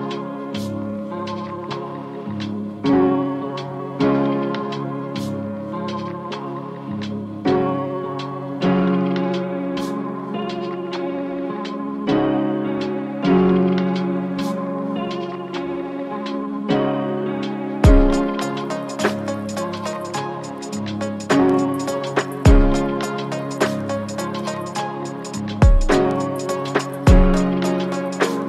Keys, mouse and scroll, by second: 21.2 u, 21.8 u.